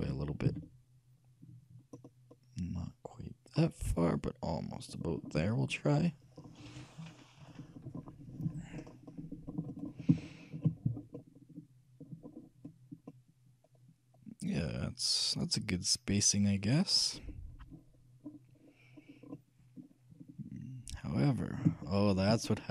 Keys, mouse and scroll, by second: 0.0 g, 5.3 middle click, 6.5 middle click, 8.9-15.0 middle drag, 18.0-19.5 scroll up 1, 19.5-21.1 middle drag, 22.0-22.7 shift+middle drag.